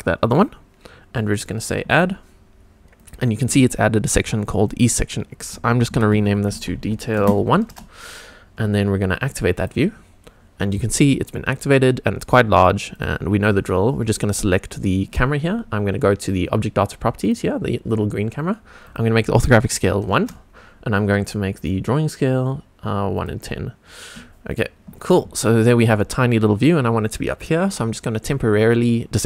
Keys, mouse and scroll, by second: 1.9 click, 3.0 click, 4.6 click, 4.8-7.7 drag, 9.6 click, 10.3-11.0 scroll down 3, 11.0 scroll up 2, 12.9 click, 17.2 click, 18.8-20.1 drag, 21.5-23.2 drag, 24.4 click, 24.9 scroll down 1, 25.4-25.8 shift+middle drag, 25.9 scroll down 2, 28.6 click.